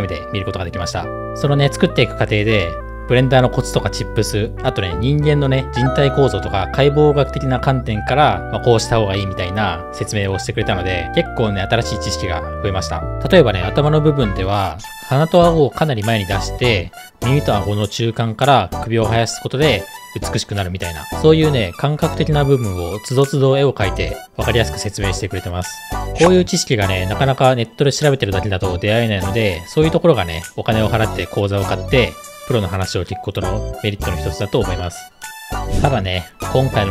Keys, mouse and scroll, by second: 35.5 click, 35.5 right click.